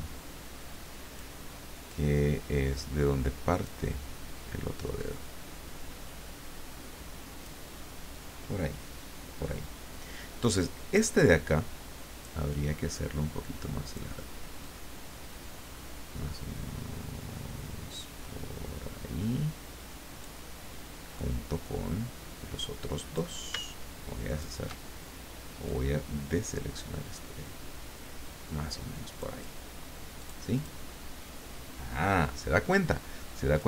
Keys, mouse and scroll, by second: 2.1-3.9 drag, 5.2-7.6 drag, 12.5-14.2 drag, 14.6-20.2 drag, 21.1-23.4 drag, 24.3 shift+click, 25.7-29.5 drag, 30.2 click, 33.5 click.